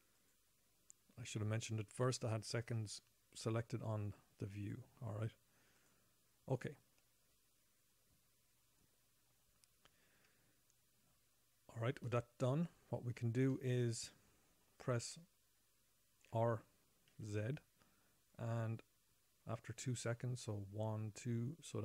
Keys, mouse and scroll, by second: 0.5 click, 5.4 click, 6.1 click, 12.4 shift+middle click, 14.2 middle click, 14.6 middle click, 16.7 r, 16.8 middle click, 16.8 r.